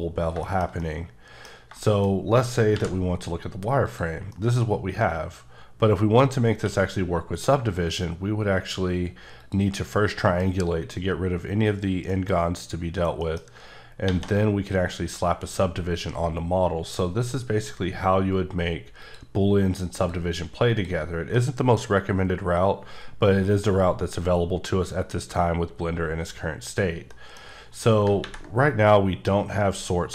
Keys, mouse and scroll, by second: 0.1 scroll down 1, 0.4 shift+middle click, 2.7 v, 3.9 click, 4.3 middle click, 6.6 q, 9.4 click, 10.1 middle click, 14.0 ctrl+1, 16.6 scroll down 3, 19.0 click, 19.9 click, 20.8 click, 21.3 middle click, 21.9 scroll up 2, 23.5 scroll up 1, 25.4-26.2 scroll down 1, 27.1 middle click.